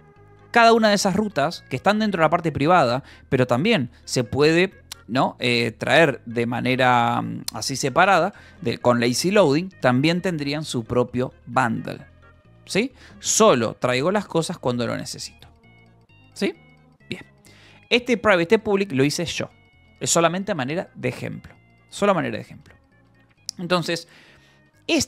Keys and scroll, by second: 0.4 j, 1.0 k, 1.4 j, 2.6 Escape, 18.3 j, 19.1 Return, 22.7 k, 23.4 j, 24.9 k.